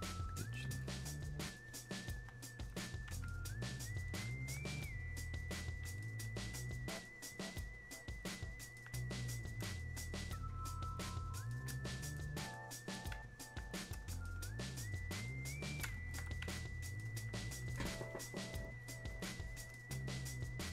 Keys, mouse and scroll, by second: 1.9-6.0 shift+drag, 6.0-18.1 shift+drag, 18.1-20.7 drag.